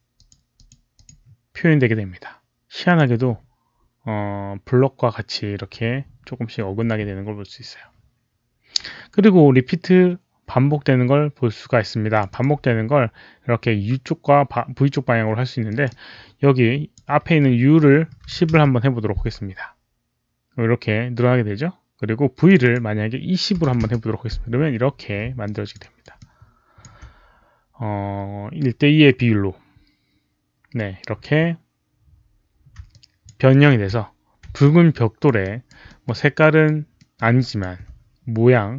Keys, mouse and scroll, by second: 0.1 click, 0.4 click, 0.8 click, 2.8 click, 5.3 click, 10.9 click, 11.3 click, 12.0 click, 12.2 click, 15.6-16.8 drag, 18.0 click, 18.1 KP_1, 18.3 KP_0, 18.4 Return, 22.4 Return, 22.4 click, 22.4-23.6 typing, 22.5 click, 22.6 Return, 23.7 Return, 25.3 alt+click, 25.7 alt+right click, 26.1 alt+click, 26.8 KP_0, 26.8 KP_2, 32.8-33.1 alt+drag, 33.4 alt+middle click, 34.5 alt+click, 34.6 alt+middle click, 34.6 alt+right click, 35.4 alt+right click, 35.8 alt+middle click, 36.0 alt+click, 36.3 alt+right click, 36.9 alt+middle click, 37.1 alt+right click, 37.3 alt+click.